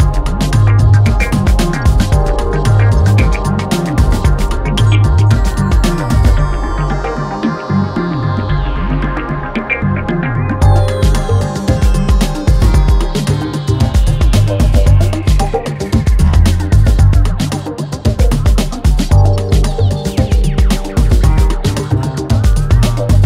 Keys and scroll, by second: 1.0 F1, 5.8 3, 16.1 ctrl+d, 16.3 Escape, 19.8 4, 21.2 3, 22.8 Escape.